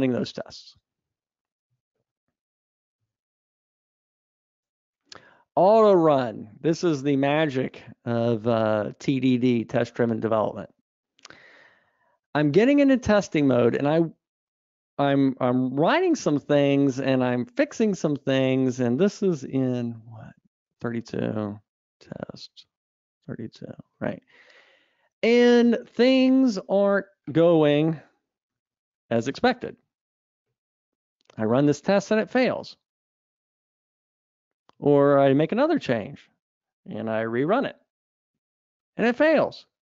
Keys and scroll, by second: 3.9 super+Up, 20.9 super+Up, 37.6 ctrl+r.